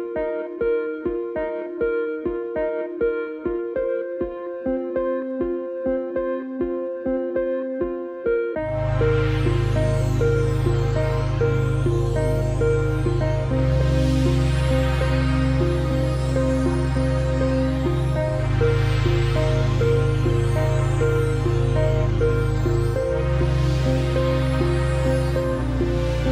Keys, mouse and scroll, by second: 0.6 click, 5.3 click, 10.8 click, 15.1 click, 17.8 click, 21.9 click, 26.2 click.